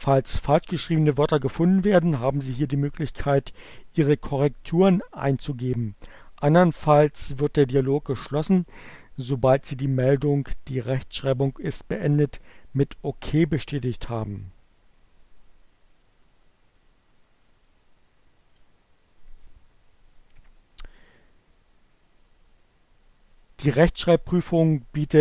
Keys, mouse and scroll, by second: 17.9 click.